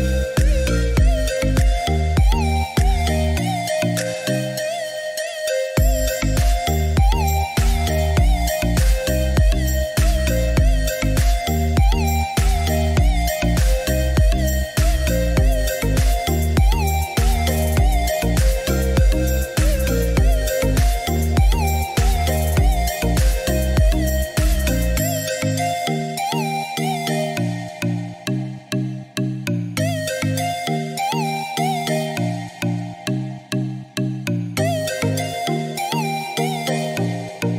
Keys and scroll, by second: 3.6 2, 3.8 Return.